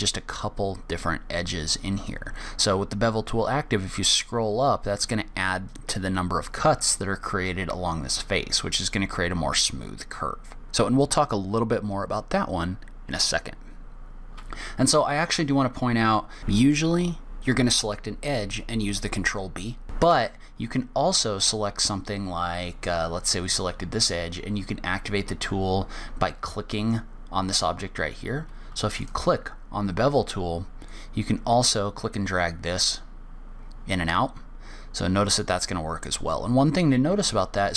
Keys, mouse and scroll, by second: 18.4 click, 20.1 middle click, 21.8 middle click, 29.4 click, 31.2 click.